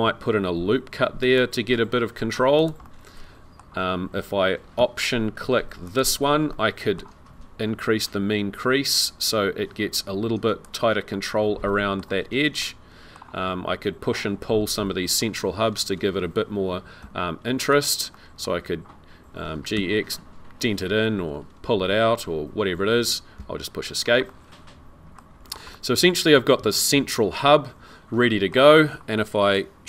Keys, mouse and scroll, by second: 0.9 ctrl+r, 2.8 middle click, 5.9 alt+click, 6.5 middle click, 8.0 click, 11.1 middle click, 12.6 middle click, 15.2-15.6 scroll up 3, 17.0 3, 17.7 click, 18.1 middle click, 19.5 g, 23.8-24.3 scroll down 3, 24.3 middle click, 25.3-25.7 scroll down 3, 25.7 middle click, 28.9-29.8 scroll up 1.